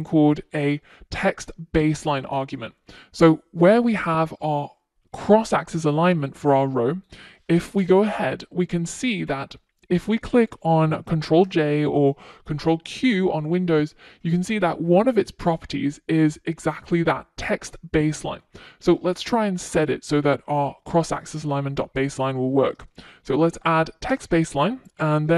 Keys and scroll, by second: 13.3 F1.